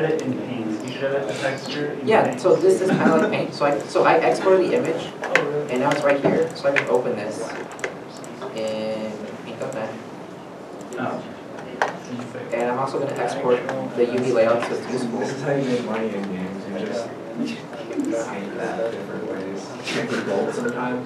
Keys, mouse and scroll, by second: 2.9 alt+Tab, 3.0 middle click, 4.8 alt+Tab, 5.4 alt+Tab, 6.5 right click, 13.5 right click, 13.5 Tab, 13.6 Tab, 14.2 Tab, 18.2 alt+Tab.